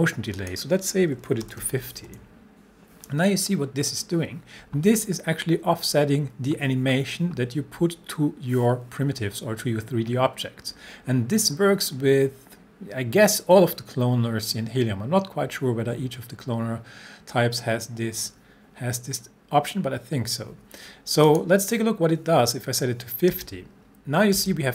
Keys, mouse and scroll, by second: 1.2-2.1 typing, 21.3 click, 23.3 space.